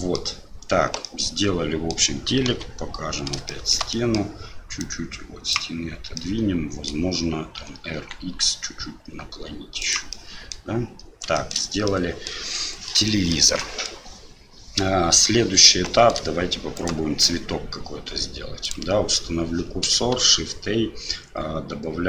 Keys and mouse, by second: 1.0-1.9 middle drag, 2.4 KP_Divide, 3.5 shift+middle drag, 3.9 middle click, 4.8 click, 6.3 middle click, 7.6 r, 10.1-10.5 middle drag, 11.3 shift+middle drag, 12.0 middle drag, 13.0-15.3 shift+middle drag, 15.9 shift+middle drag, 16.7 right click, 18.7-19.9 right drag, 20.1 shift+a.